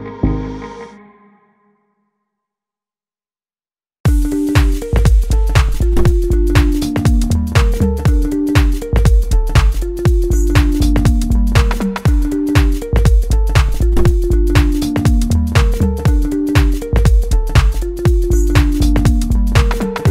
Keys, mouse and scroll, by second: 2.2-3.9 drag, 5.2-11.4 drag, 12.9-17.5 drag, 17.7-19.4 drag.